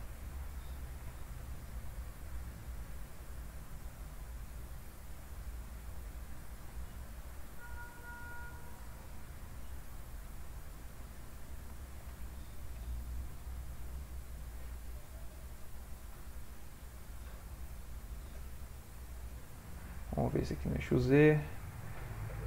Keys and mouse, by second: 1.0 g, 4.1 click, 4.8 g, 8.9 click, 10.8 click, 11.8 shift+click, 12.1 shift+click, 12.8 g, 21.5 click.